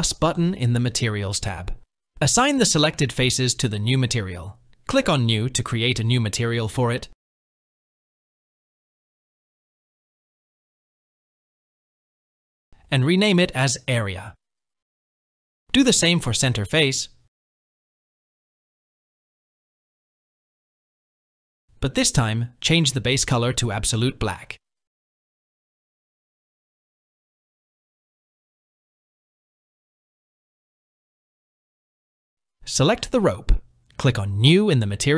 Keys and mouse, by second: 3.5 click, 4.9 click, 12.0-14.8 drag, 16.4 click, 18.7 click, 27.8 Tab, 28.0 middle click, 28.8-30.0 middle drag, 30.5 KP_1, 32.4 click, 33.9 click.